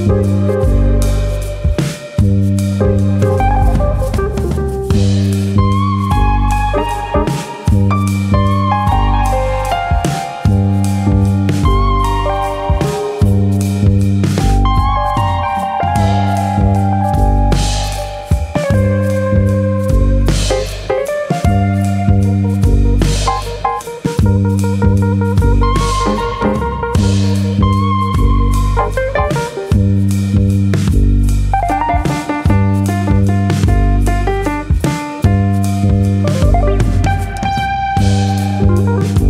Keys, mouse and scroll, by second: 0.4 middle click, 0.6 Tab, 1.0 middle click, 1.3-1.7 scroll down 3, 1.7 middle click, 2.5 middle click, 2.9 scroll up 2, 3.3 shift+middle click, 3.4 shift+middle click, 3.7 scroll up 1, 3.9 Tab, 4.2 middle click, 4.8 click, 5.5 ctrl+click, 5.7 middle click, 6.3 click, 7.0 middle click, 7.2-7.9 scroll down 3, 7.6 middle click, 8.2-9.3 scroll down 2, 8.4 middle click, 9.3 Tab, 9.5 scroll down 1, 9.7 middle click, 12.7 KP_1, 13.8 ctrl+Tab, 15.0 scroll up 3, 15.3 shift+middle click, 16.7 click, 17.8 ctrl+z, 18.3 shift+middle click, 18.3-18.9 scroll up 1, 18.9 click, 26.8 click, 28.3 click, 32.9 click, 34.7 click, 34.9 middle click, 34.9-36.2 scroll down 5, 36.2 click, 37.2 click, 37.8 middle click, 38.6 middle click.